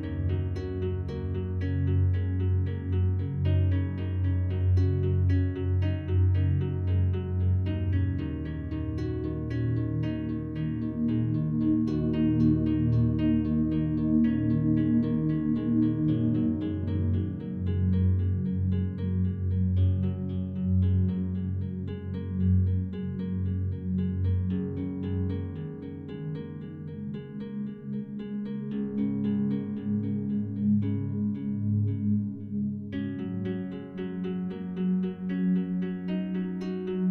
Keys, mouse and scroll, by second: 0.3 click, 1.8 shift+click, 3.4-3.8 shift+drag, 4.2-5.6 drag, 5.8 click, 7.2 click, 8.1 click, 9.5 click, 10.2 click, 10.5 ctrl+click, 11.0-37.1 ctrl+d, 12.0-12.8 drag, 13.0-16.9 ctrl+drag, 16.9 -, 17.1 -, 17.2 -, 19.0 click, 20.4-23.1 drag, 24.6 click, 25.3 click, 26.1 click, 27.0 click, 29.6 click, 30.2 click, 31.3 click, 32.0-33.0 drag, 33.6 click, 34.7 click, 35.2 click, 36.1 click.